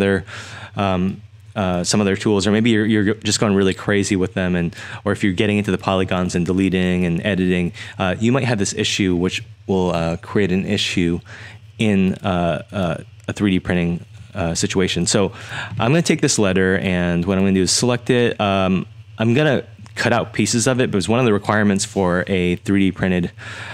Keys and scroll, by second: 2.5-3.3 typing, 5.1-7.1 typing, 9.2-10.0 typing.